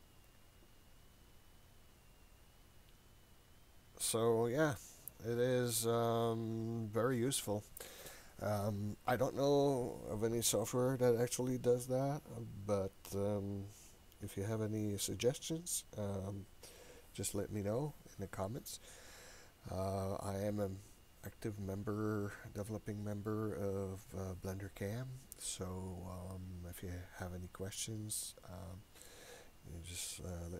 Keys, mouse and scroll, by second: 0.3-1.6 drag, 2.5-5.5 drag.